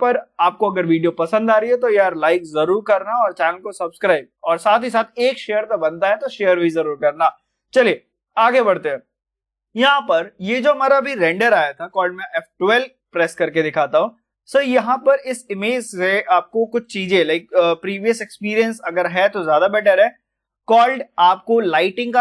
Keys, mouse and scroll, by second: 11.7 F12, 13.1-19.5 drag.